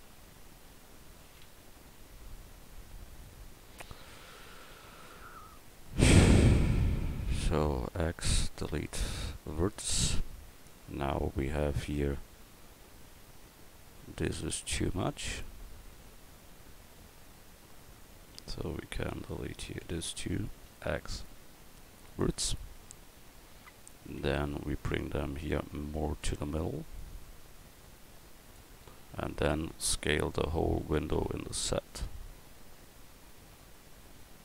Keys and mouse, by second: 0.0 l, 0.9 l, 3.6 ctrl+z, 4.7 ctrl+z, 6.3 l, 7.2 l, 7.9 x, 9.8 Tab, 16.0 Tab, 19.1 l, 19.8 l, 20.5 x, 22.8 Tab, 24.2 Tab, 25.7 l, 26.3 l, 29.0 Tab, 31.1 s.